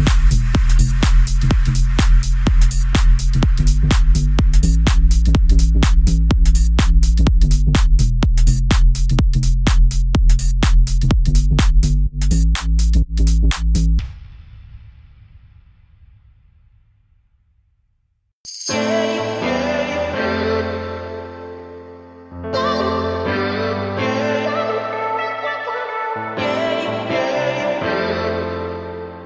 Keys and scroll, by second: 18.1 Escape, 18.9 o.